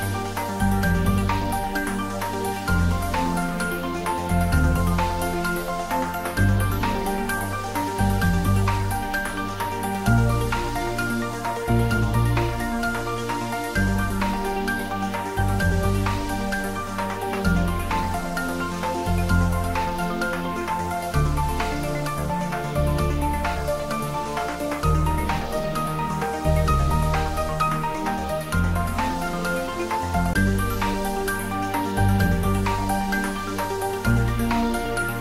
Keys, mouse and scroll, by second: 4.5 click, 7.1-8.3 scroll up 1, 10.1 click, 12.2-12.7 scroll up 1, 12.7-13.4 middle click, 13.8 Tab, 14.9-15.3 scroll down 1, 16.5-18.6 scroll up 1, 19.7-22.7 drag, 25.4-27.6 drag.